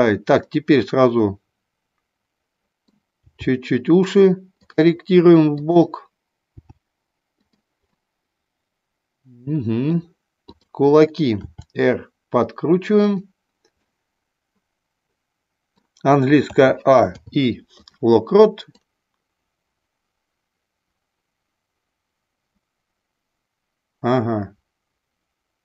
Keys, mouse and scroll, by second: 0.4-3.0 middle drag, 3.2 g, 5.5 click, 6.5 g, 7.4 click, 7.9-9.9 middle drag, 11.4 r, 13.8-15.8 middle drag, 16.4 a, 17.0 i, 18.8-25.6 drag.